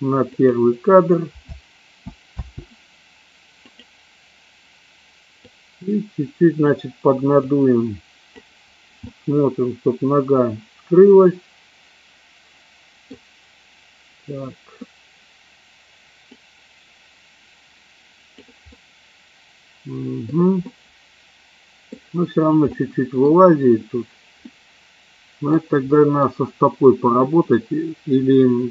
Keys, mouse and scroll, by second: 0.3 click, 1.4 space, 1.9 space, 2.3 space, 3.6 click, 5.5-6.6 drag, 7.4 click, 8.9-13.0 middle drag, 16.3-18.4 drag, 18.8-20.3 middle drag, 20.5-21.9 middle drag, 21.9 scroll down 1, 22.6-23.3 middle drag, 24.4-25.5 middle drag, 25.8 middle click, 26.1 scroll down 1, 27.3-28.7 middle drag.